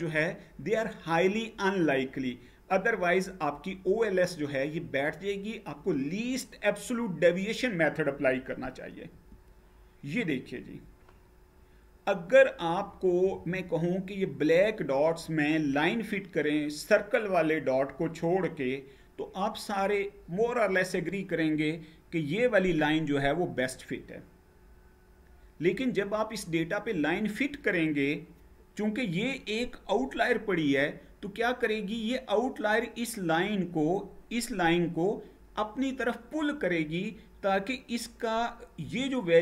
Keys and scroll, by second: 8.8 Page_Down.